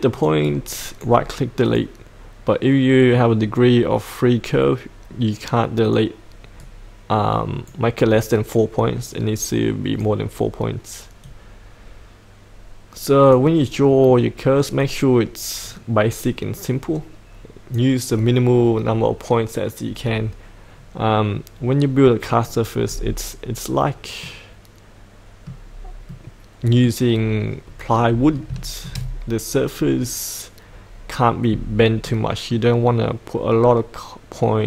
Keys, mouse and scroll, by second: 0.4 right click, 1.6 click, 6.6-7.9 right drag, 9.1-18.1 drag, 22.9-23.5 scroll up 1, 24.2 middle click, 25.7-26.1 scroll up 1, 26.1 middle click, 27.1-28.5 scroll down 1, 28.5 shift+middle click, 29.7-32.0 scroll up 1, 32.0 middle click.